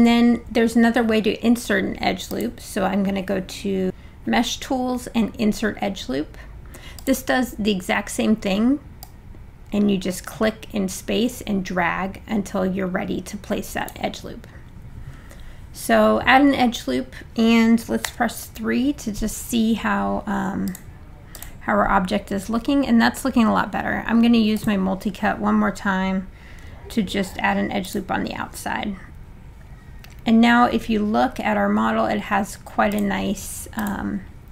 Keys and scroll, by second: 18.0 3.